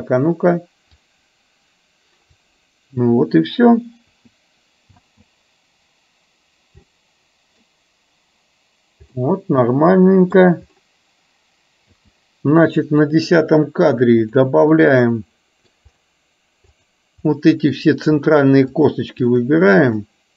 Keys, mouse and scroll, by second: 0.9 click, 1.2-2.4 drag, 4.9 space, 6.9-7.7 middle drag, 9.2-10.4 middle drag, 14.3 click, 14.3 space, 14.8-15.8 middle drag, 16.8 click, 17.3 middle click, 18.7 shift+click, 19.3 shift+click.